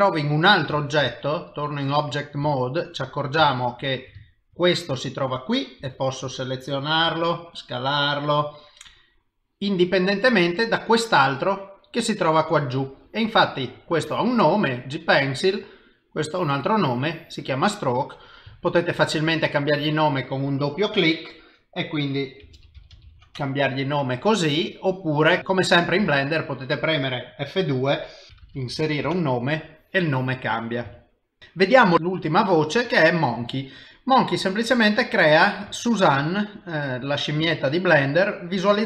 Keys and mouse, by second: 1.0 ctrl+Tab, 2.6 ctrl+middle click, 3.1 ctrl+middle click, 3.5 shift+middle click, 4.2 ctrl+middle click, 4.6 middle click, 5.8 g, 6.5 s, 7.0 s, 8.5 middle click, 9.9 click, 10.7 click, 11.3 middle click, 12.7 shift+middle click, 15.7 s, 16.2 click, 18.0 middle click, 18.5 shift+middle click, 19.5 click, 19.6 click, 23.3 Return, 25.4 click, 26.0 F2, 28.4 c, 30.5 middle click, 31.0 shift+middle click, 31.4 middle click, 31.9 shift+a, 34.3 middle click, 35.7 shift+middle click, 36.3 middle click, 37.6 ctrl+middle click, 38.4 middle click.